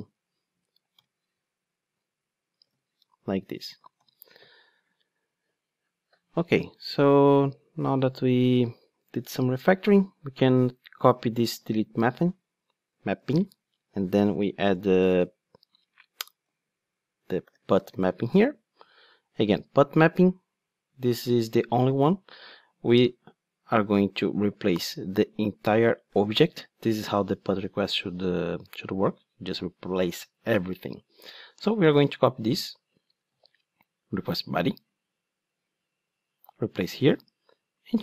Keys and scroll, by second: 0.6 Return, 3.9 alt+super+l, 11.6 super+c, 13.2 super+v, 18.4 Return, 33.3 super+c, 36.8 super+v.